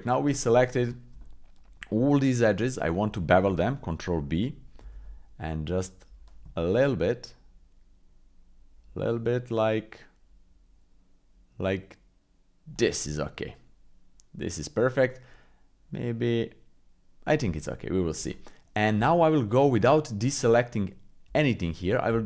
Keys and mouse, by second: 0.8 shift+click, 1.2-2.7 drag, 4.8 ctrl+b, 13.4-15.0 middle drag, 16.4 click, 17.6 shift+middle click, 18.3 middle click, 19.0 Tab.